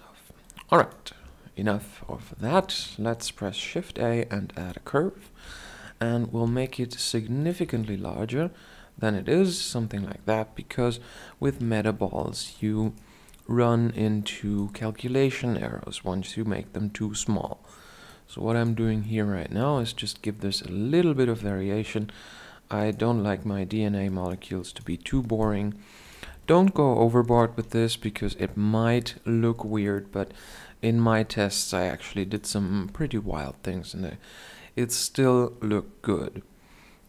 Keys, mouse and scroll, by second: 0.0-1.8 drag, 1.8 shift+a, 4.9 Tab, 5.9 s, 7.1 Tab, 7.1-10.9 drag, 10.9 Tab, 13.2 click, 13.2-16.9 right drag, 16.9-21.3 drag, 18.5-21.3 right drag, 19.2 Tab, 21.3 Tab, 23.6-24.7 right drag, 25.7 Tab, 28.2 KP_7, 30.5 Tab, 31.0-37.0 right drag, 32.0 Tab.